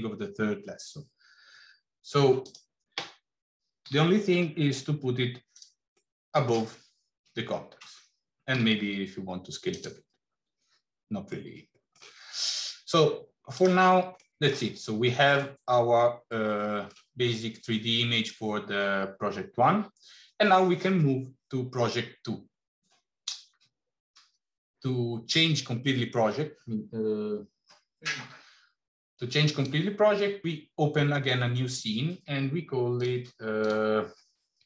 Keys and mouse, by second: 3.7 g, 5.8 middle click, 8.5 s, 11.1 middle click, 14.1 middle click, 15.2-16.9 middle drag, 29.3-33.0 drag, 33.6-34.6 drag.